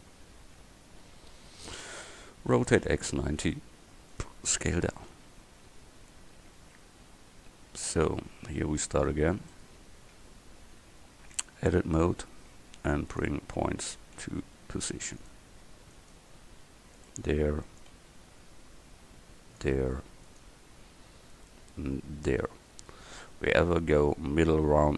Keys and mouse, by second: 2.6 r, 4.6 s, 5.2 s, 8.8-9.7 middle drag, 10.8 KP_1, 11.6 Tab, 12.2 a, 14.3 g, 16.3 g, 18.0 g, 20.5 g.